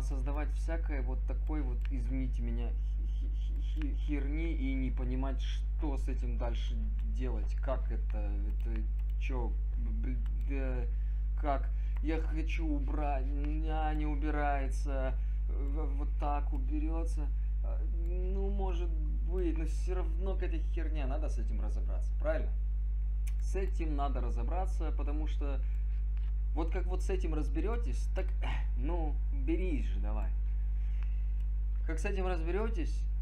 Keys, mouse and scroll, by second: 11.2 click, 25.3 click.